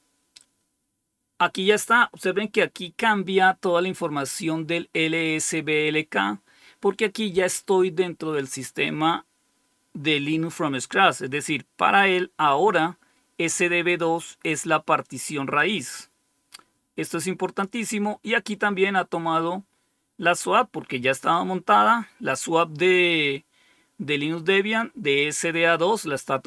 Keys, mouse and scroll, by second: 11.1-13.9 drag, 14.9 click, 15.5-17.6 drag, 18.6-21.1 drag.